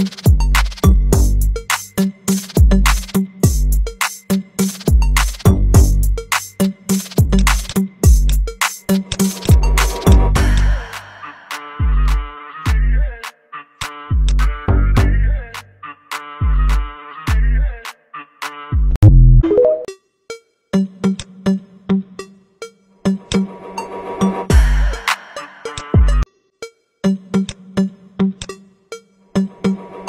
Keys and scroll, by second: 23.1 Delete.